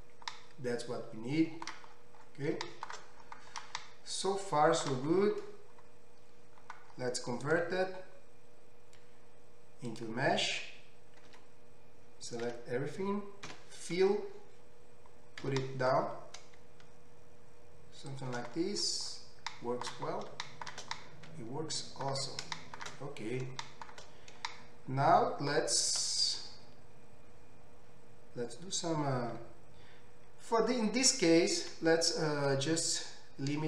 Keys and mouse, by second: 5.9-6.8 drag, 5.9-6.8 right drag, 11.3 Tab, 12.4-14.4 drag, 12.4-14.4 right drag, 12.4 a, 13.5 f, 15.4 g, 17.8 shift+click, 17.8 shift+middle click, 17.8-19.5 shift+right drag, 18.8 middle click, 19.5-25.7 middle drag, 24.7 shift+right click, 25.1 shift+right click, 25.6-33.6 shift+right drag, 31.7 q.